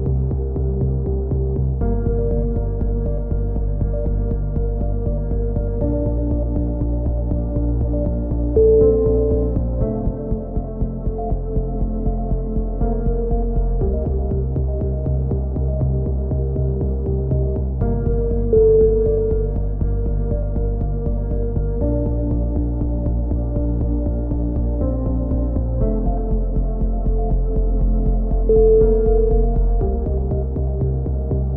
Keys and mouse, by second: 0.3 n, 0.9 s, 6.5 middle click, 6.8 t, 7.2-8.2 drag, 8.2 middle click, 8.5 right click, 9.6-11.1 drag, 11.3 click, 12.1 right click, 12.6-14.3 drag, 14.3 right click, 14.8 click, 16.5 click, 17.0 right click, 17.5 click, 18.4 click, 19.4 a, 19.6 z, 19.8 middle click, 20.1 z, 20.3 middle click, 20.7 middle click, 21.1 click, 22.0 KP_7, 22.4 z, 23.5 middle click, 23.5 z, 23.8 z, 24.2 KP_3, 27.0 ctrl+r, 31.3 click.